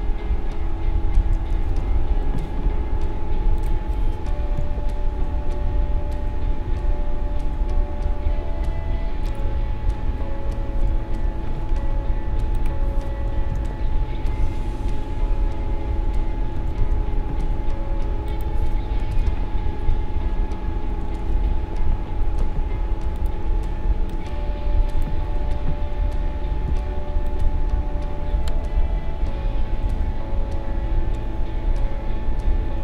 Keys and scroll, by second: 1.3 shift+Left, 4.6 shift+Right, 13.5 shift+Right, 19.2 shift+Left.